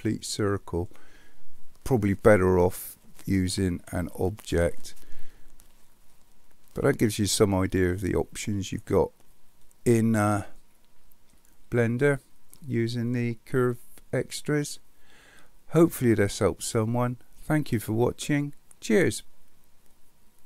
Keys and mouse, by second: 6.1-6.9 middle drag, 9.6-11.3 middle drag, 11.8-12.5 middle drag.